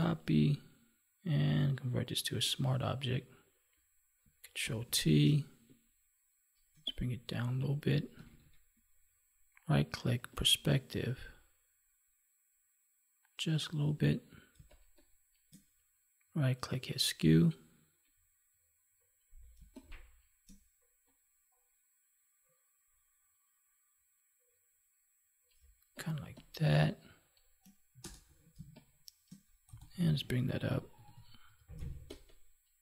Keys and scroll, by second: 4.6 ctrl+t, 8.1 ctrl+=, 14.4 space, 19.5 space, 25.5 space, 28.5 space, 31.7 space.